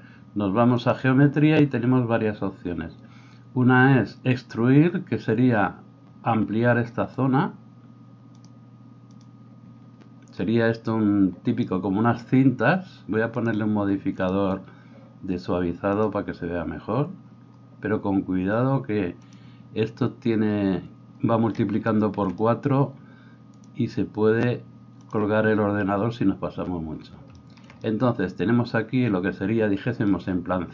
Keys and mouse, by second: 13.5 middle click, 14.3-30.7 drag.